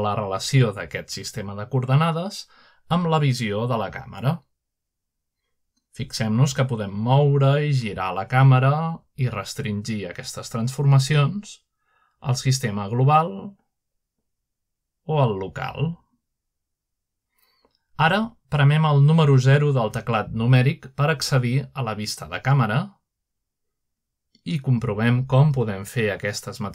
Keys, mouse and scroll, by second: 0.8 shift+middle click, 1.4-3.0 middle drag, 5.7-7.7 middle drag, 8.0 g, 9.0 right click, 9.2-9.8 middle drag, 9.5 r, 12.8 z, 15.8 z, 20.0-21.2 right drag, 21.9 0, 23.2-24.2 scroll up 1, 23.8-25.0 shift+middle drag.